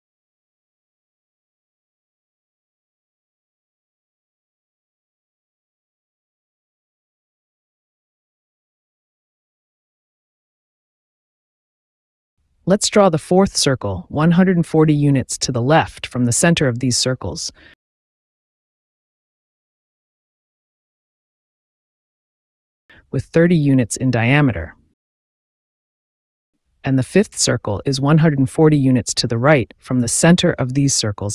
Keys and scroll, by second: 3.4 KP_7, 3.5 KP_0, 5.1 Return, 11.7 c, 12.5 space, 17.3 KP_1, 17.6 KP_4, 17.8 KP_0, 19.5 Return, 21.4 d, 22.1 space, 23.3 KP_3, 23.4 KP_0, 24.0 Return, 25.9 c, 26.6 space, 30.4 KP_1, 30.6 KP_4, 30.8 KP_0.